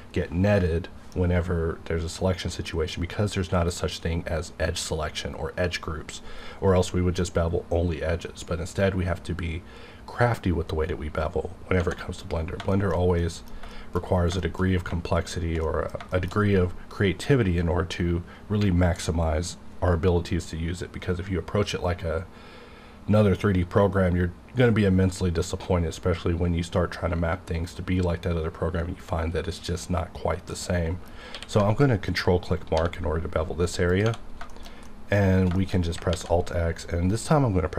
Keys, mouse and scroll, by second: 12.2 click, 12.7 shift+middle click, 14.0 scroll down 1, 14.4 shift+middle click, 15.1 shift+click, 15.6 shift+middle click, 16.4-18.2 scroll up 2, 30.6 middle click, 31.3 q, 32.1 ctrl+click, 32.8 1, 32.9-33.9 scroll up 1, 34.0 click, 34.2 scroll down 1, 34.5 shift+middle click, 34.8 middle click, 35.2 scroll down 1, 35.6 shift+middle click, 35.8 shift+scroll up 2, 36.1 alt+x.